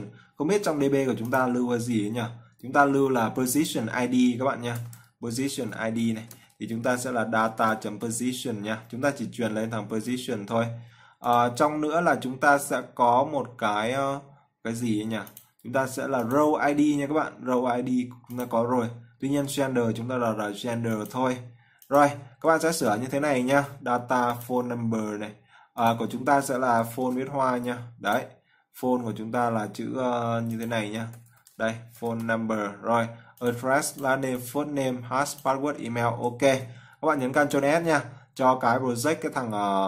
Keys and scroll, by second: 37.5 ctrl+s.